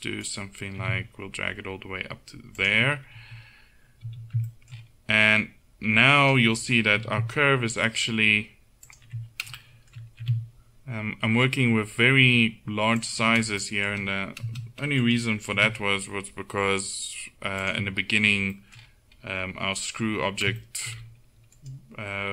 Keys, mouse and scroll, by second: 0.8 g, 3.4 z, 4.1 z, 7.0 g, 10.3 g, 15.1 click, 15.6 g, 21.6 middle click.